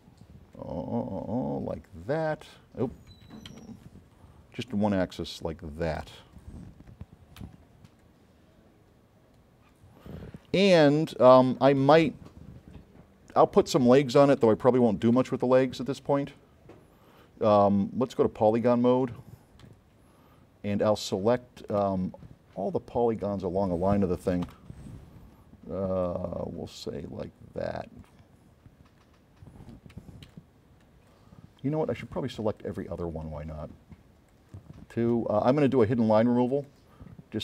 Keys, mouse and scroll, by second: 0.6-3.1 drag, 3.6 z, 4.7-6.0 drag, 6.4 click, 7.5 v, 8.1-9.9 drag, 11.0 click, 12.8-13.4 scroll up 4, 14.5 s, 16.5 scroll up 2, 17.1 scroll down 2, 18.2 click, 18.7 middle click, 18.7 scroll up 2, 19.7 s, 19.8 right click, 21.4 right click, 24.7 F9, 26.1-28.2 drag, 28.8 scroll down 1, 29.1-29.4 scroll up 2, 30.4 s, 30.5 right click, 31.2 click, 32.7 click, 33.5 click, 34.4 shift+click, 35.8 drag, 36.8 click.